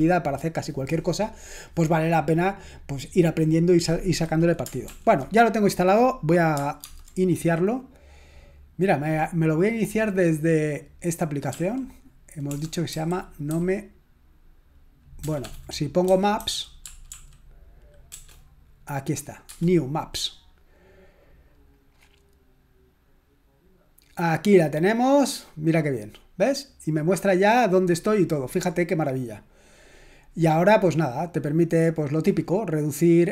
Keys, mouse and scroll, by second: 4.9 ctrl+l, 6.9 super+_, 11.5 s, 12.9-14.0 typing, 15.2-18.1 typing, 19.8 Return, 31.7 click.